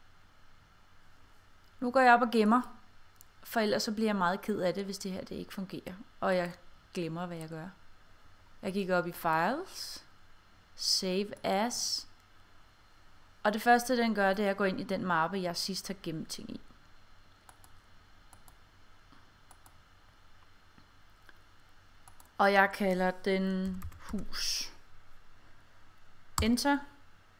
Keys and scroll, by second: 23.7 h, 24.2 s, 26.5 Return.